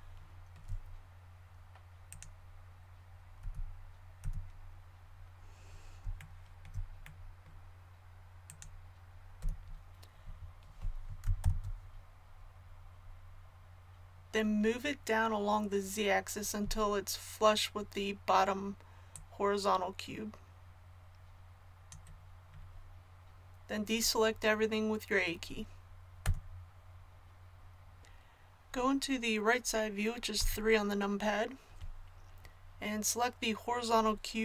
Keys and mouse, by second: 3.4 z, 4.2 a, 5.0 middle click, 9.4 z, 11.4 ctrl+KP_1, 11.4-12.9 middle drag, 14.0-19.1 middle drag, 19.1-21.8 drag, 26.2 a, 30.3 KP_3.